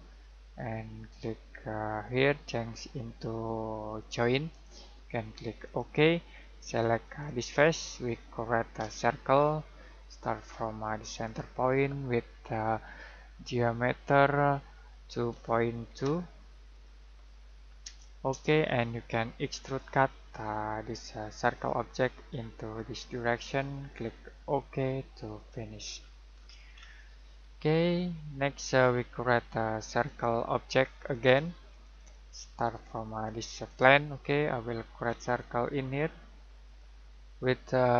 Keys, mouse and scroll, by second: 2.0 click, 8.7 c, 11.1 click, 15.3 typing, 16.5-17.2 typing, 17.8 Return, 19.7 click, 25.8 scroll down 1, 25.9-27.3 scroll up 1, 27.5 shift+middle click, 30.0 click, 34.6-35.0 scroll down 1, 36.6 click.